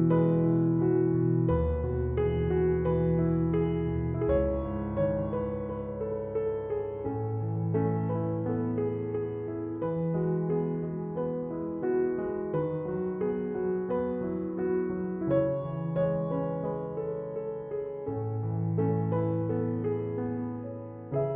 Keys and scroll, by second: 0.8 Return, 8.9 Escape, 17.0 7, 17.9 Return, 19.7 Escape.